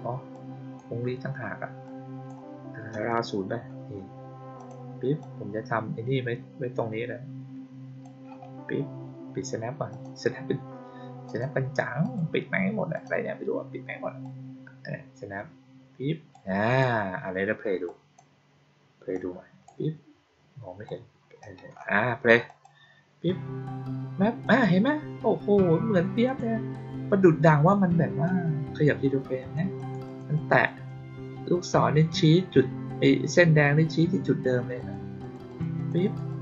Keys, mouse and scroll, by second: 0.2 click, 1.8-2.2 drag, 4.5 click, 5.1-7.9 drag, 9.8 click, 11.2 click, 11.9 click, 12.9 click, 14.2-16.2 drag, 16.6 click, 17.8-18.1 drag, 19.1-19.6 drag, 20.8 click, 22.4 click, 24.4 click, 26.2 click, 27.6 click, 29.3 click, 29.7 click, 30.0 click, 30.3 click, 30.6 click, 34.7 click, 35.1 click, 35.4 click, 35.7 click, 36.0 click, 36.2 click.